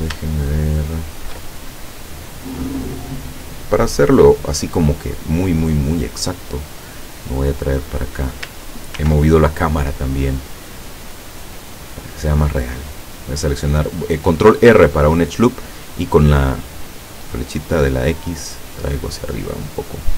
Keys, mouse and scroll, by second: 0.5 shift+middle click, 6.9 right click, 7.7-8.2 scroll up 2, 9.0 ctrl+r, 9.4 ctrl+click, 12.3 click, 13.0 right click, 17.2-20.1 drag.